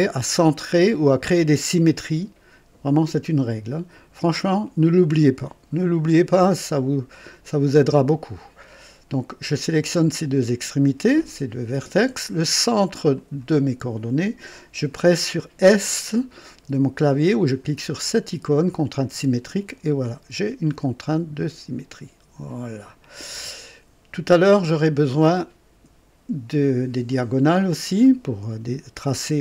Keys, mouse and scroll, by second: 4.8 click, 7.1 click, 13.1 click, 19.1 s, 21.0-23.3 drag, 27.8 click.